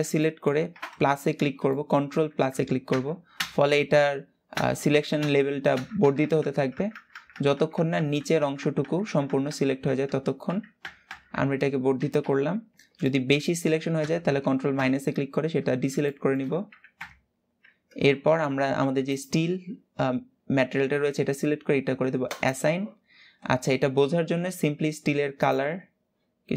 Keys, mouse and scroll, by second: 2.6 ctrl+KP_Add, 3.0 ctrl+KP_Add, 4.8 ctrl+KP_Add, 5.4 ctrl+KP_Add, 5.7 ctrl+KP_Add, 5.9 ctrl+KP_Add, 6.1 ctrl+KP_Add, 6.3 ctrl+KP_Add, 6.4 ctrl+KP_Add, 6.6 ctrl+KP_Add, 6.8 ctrl+KP_Add, 7.0 ctrl+KP_Add, 7.3 ctrl+KP_Add, 7.5 ctrl+KP_Add, 7.6-9.0 ctrl+KP_Add, 9.2 ctrl+KP_Add, 9.4 ctrl+KP_Add, 9.6 ctrl+KP_Add, 9.8 ctrl+KP_Add, 10.2 ctrl+KP_Add, 10.5 ctrl+KP_Add, 10.7 ctrl+KP_Add, 11.9 ctrl+KP_Subtract, 12.7-13.7 middle drag, 13.7 ctrl+KP_Add, 14.4 ctrl+KP_Subtract, 15.3 scroll up 2, 15.7 shift+middle click, 16.6 ctrl+KP_Subtract, 18.8 click, 22.1 click, 22.6-23.0 scroll down 4, 23.0-26.4 scroll up 3, 26.4 click.